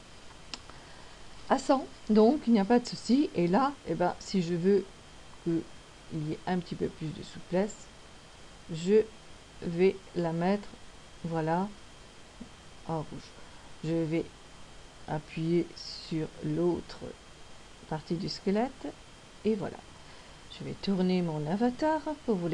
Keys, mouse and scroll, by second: 3.6 click, 14.9 right click, 16.5 click, 21.7 middle click.